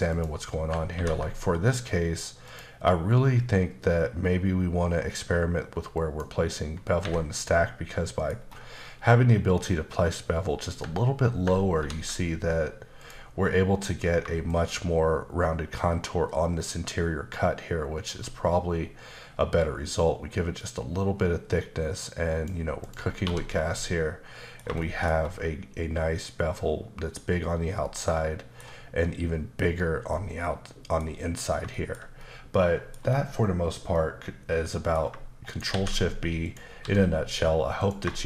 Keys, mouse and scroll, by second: 0.9 ctrl+`, 2.5 click, 6.0 click, 7.0 Escape, 7.3 middle click, 8.4 scroll up 1, 13.0 click, 14.5 shift+click, 22.8 click, 23.1-23.7 scroll down 3, 23.2 1, 23.7 middle click, 24.8 shift+middle click, 25.1-27.3 scroll up 2, 27.8 middle click, 30.1 middle click, 31.4 scroll down 1, 31.7 shift+middle click, 33.9 middle click, 35.5 shift+right click, 35.7 shift+a, 36.5 click, 36.8 s, 37.8 click.